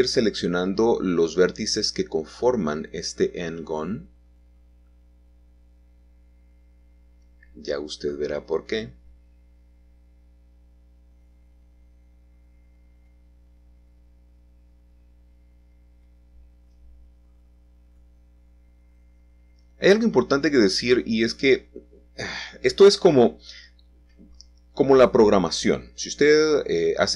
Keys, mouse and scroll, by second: 0.1 click, 1.5 shift+click, 2.2 shift+click, 3.2 shift+click, 3.7-4.7 scroll down 1, 4.7 shift+middle click, 5.6-8.7 shift+middle drag, 6.7-7.7 scroll up 1, 10.1 shift+middle click, 10.3-11.6 shift+drag, 11.7 shift+click, 12.4 shift+click, 13.0 shift+click, 13.7-14.2 scroll up 2, 14.2-17.5 shift+middle drag, 15.1-15.6 scroll down 2, 16.0-16.4 shift+scroll down 1, 17.7-18.8 shift+middle drag, 17.7-18.3 shift+scroll down 1, 20.8-23.5 shift+scroll down 2, 24.6-26.0 scroll up 2, 26.0 shift+middle click.